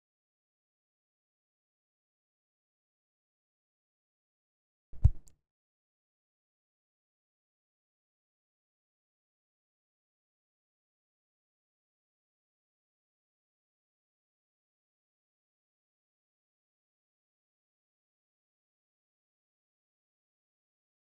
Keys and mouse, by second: 0.1 middle click, 1.1-1.5 shift+middle drag, 2.2 click, 2.7 middle click, 3.9-4.3 shift+middle drag, 5.8 click, 8.1-8.8 middle drag, 9.1 click, 11.2 click, 13.1 click, 15.5 ctrl+z, 16.6-21.0 drag.